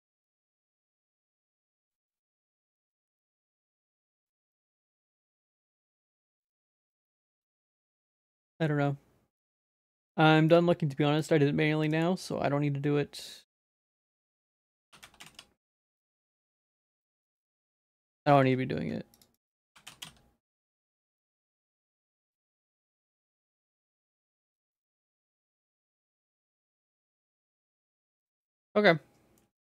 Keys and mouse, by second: 10.5 click, 11.9 click, 13.7-17.1 drag, 18.4 ctrl+s, 19.4 click, 19.6-21.1 drag, 21.7-23.7 drag, 24.3 click, 25.2 click, 26.1 ctrl+s, 28.1 click, 29.4 middle click.